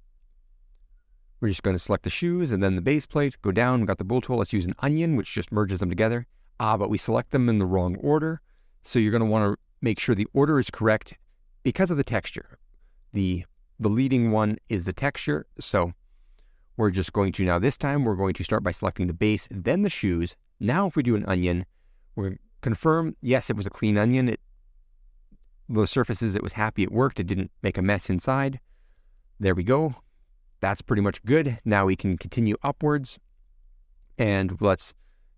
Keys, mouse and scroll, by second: 0.0 middle click, 0.6 click, 0.8 middle click, 1.4 click, 5.3 click, 5.9-6.2 scroll up 3, 6.2 middle click, 6.7-7.0 scroll up 5, 7.0 middle click, 7.9 scroll down 1, 8.1-9.7 middle drag, 10.0-10.3 scroll down 4, 10.3-11.8 middle drag, 13.5 ctrl+z, 13.9-15.4 middle drag, 15.5 click, 16.0 click, 16.8 click, 17.7 click, 18.3 click, 18.6 click, 19.2 shift+click, 21.5 click, 22.0 middle click, 22.3-22.7 scroll up 7, 22.7-24.3 middle drag, 25.5 scroll down 6, 25.7 middle click, 26.4-27.1 scroll up 1, 27.1 click, 27.6-29.3 middle drag, 29.3 t, 29.7 scroll up 3, 30.0 middle click, 30.8 middle click, 30.8-32.0 scroll up 1, 32.9 t, 34.2 t.